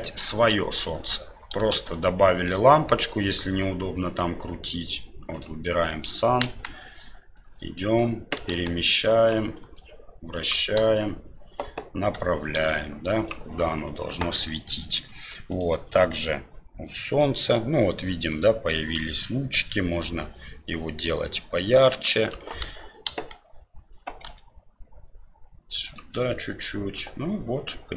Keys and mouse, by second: 1.7 shift+a, 6.4 KP_1, 7.3 click, 8.6 g, 9.7 r, 10.7 KP_7, 12.5 e, 15.4 click, 19.7-22.3 drag, 23.1 KP_1, 24.2 r.